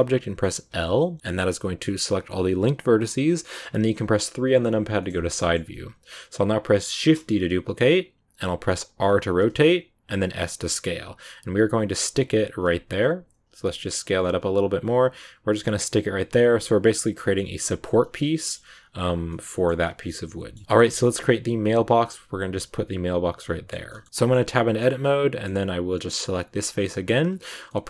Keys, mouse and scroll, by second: 0.7 scroll down 2, 0.9-3.5 middle drag, 3.5 KP_3, 4.5 click, 4.9 shift+middle click, 5.0-5.5 scroll up 3, 5.3 shift+middle click, 6.1-6.8 scroll down 1, 6.8 shift+d, 8.7 r, 15.7 g, 18.6 s, 19.2 middle click, 19.8 scroll down 2, 20.0 middle click, 20.5 Tab, 20.6 shift+middle click, 20.9 scroll up 2, 23.3 middle click, 23.6 scroll down 2, 23.8-26.2 middle drag, 26.2 right click, 26.7-27.8 middle drag.